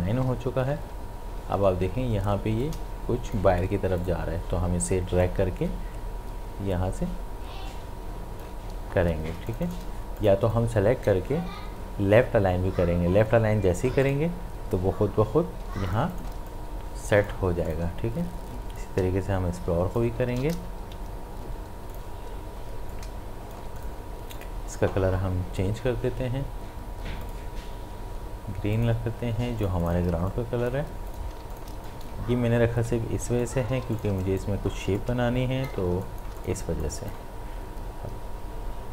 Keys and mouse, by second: 0.1 ctrl+y, 2.6-9.3 drag, 9.3 space, 9.5 ctrl+alt+click, 10.2-13.4 drag, 14.0 click, 15.7 space, 15.9 ctrl+click, 16.4 space, 16.5 click, 16.9 space, 17.7-21.0 drag, 21.0 Left, 21.9 click, 27.2 click, 30.1 space, 30.3 click, 30.6 space, 31.1 click, 31.3 space, 31.5 ctrl+alt+click, 31.9 click, 33.4 shift+click, 33.8 space, 34.0 ctrl+alt+click, 34.2 ctrl+click, 35.0 alt+click, 35.9 shift+space, 36.0 click.